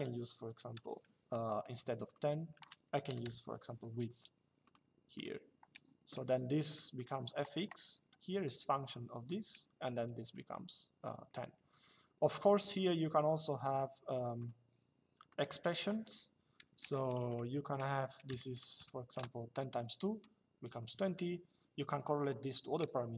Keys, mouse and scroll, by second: 0.9 Escape, 2.5-3.5 typing, 4.4 click, 6.4 middle click, 13.2 click, 16.6 Left, 18.8 Return.